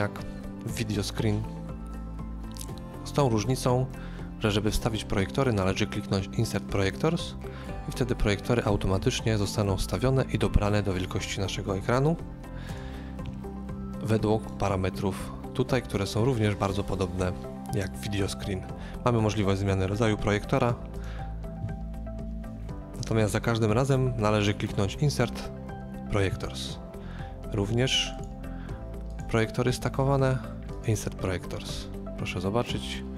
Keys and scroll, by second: 9.0 x.